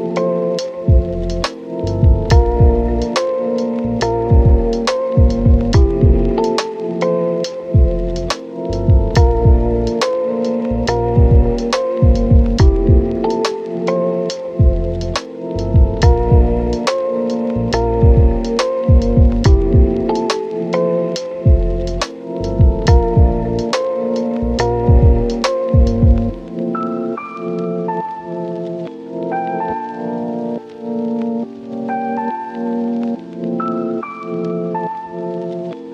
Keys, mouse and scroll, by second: 0.1 typing, 0.4 Return, 1.3-1.6 scroll down 1, 1.6 click, 1.8-2.6 scroll up 1, 2.6 click, 3.1 scroll down 1, 3.2-3.7 scroll up 2, 3.4 Tab, 3.7 Tab, 4.2 ctrl+shift+click, 5.9 Tab, 6.0 scroll down 1, 6.1-6.8 scroll up 2, 6.4 Tab, 6.8 scroll down 1, 6.9 scroll up 1, 7.0 Tab, 7.2 right click, 7.5-7.9 scroll up 1, 7.9 Tab, 8.6 scroll up 1, 8.9 ctrl+shift+click, 9.6 scroll down 1, 9.7 scroll up 1, 10.0 click, 10.9 ctrl+shift+click, 12.2 ctrl+shift+click, 14.4 ctrl+shift+click, 16.6 ctrl+shift+click, 17.7 Return, 18.7 click, 21.1 ctrl+shift+click, 21.6 right click, 22.2 click, 22.3 Tab, 22.5 scroll down 1, 22.6 scroll up 1, 22.8 Tab, 23.6 click, 24.2 ctrl+shift+click, 25.4 Tab, 26.1 click, 26.7-27.1 scroll up 1, 27.2 ctrl+shift+click, 28.5 ctrl+shift+click, 29.7 scroll down 1, 29.8 scroll up 1, 30.0 ctrl+shift+click, 30.3 scroll up 1, 30.6 click, 31.6 scroll down 1, 31.7-33.4 scroll up 2, 31.9 Tab, 33.4 scroll down 1, 33.7-35.1 scroll up 1, 35.1 Tab, 35.7 scroll up 1.